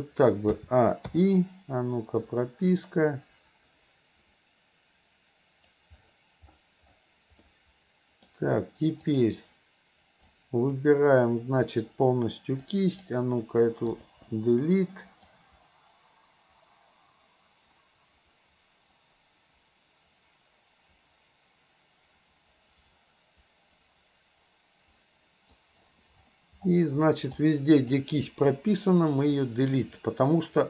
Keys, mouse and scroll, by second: 0.6 a, 1.2 i, 2.4-5.8 drag, 7.5-8.3 middle drag, 9.1 click, 10.3-10.9 drag, 12.6-13.1 drag, 14.1 Delete, 15.4-25.7 drag, 27.4-27.9 drag, 28.6 Delete.